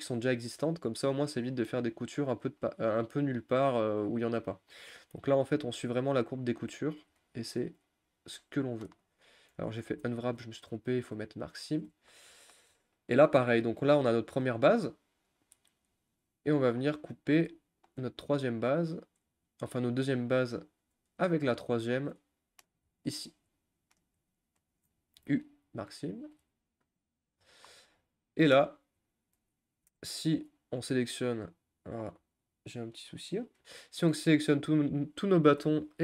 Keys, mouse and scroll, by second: 5.3 scroll up 1, 5.3-8.3 middle drag, 8.3-8.7 scroll down 2, 8.7 middle click, 9.1 click, 9.7 ctrl+z, 11.2 u, 11.6 shift+middle click, 11.9-12.3 shift+scroll down 3, 12.3-13.4 middle drag, 13.4-13.7 scroll down 4, 13.7 middle click, 14.3-14.8 scroll down 3, 14.8 scroll up 2, 16.7-17.6 scroll up 6, 17.6 shift+middle click, 18.0-19.6 scroll up 5, 19.6 click, 21.3 shift+click, 22.0 shift+click, 22.2 middle click, 23.1 shift+click, 23.4 shift+click, 23.5 scroll up 1, 23.6 middle click, 24.4 shift+click, 24.7 shift+click, 27.1 u, 27.4-28.1 scroll down 10, 28.1 click, 28.3 middle click, 28.9 scroll down 1, 29.1-34.1 shift+middle drag, 34.1 a, 34.5-36.0 scroll up 1.